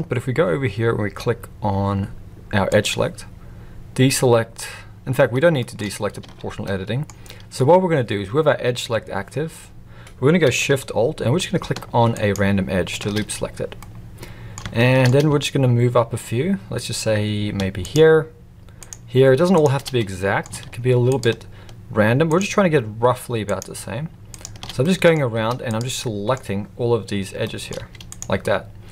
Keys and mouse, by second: 2.7-3.9 drag, 5.6 shift+middle drag, 6.2 alt+a, 6.6 middle click, 12.2 alt+shift+click, 13.8-14.5 middle drag, 14.8 shift+middle drag, 17.8 alt+shift+click, 19.5 alt+shift+click, 19.9 middle click, 21.0-23.2 alt+shift+drag, 23.4 alt+shift+click, 24.3 alt+shift+click, 24.8 middle click, 25.3 z, 26.0 middle click, 27.4 middle click, 27.8 z, 28.4-28.9 middle drag.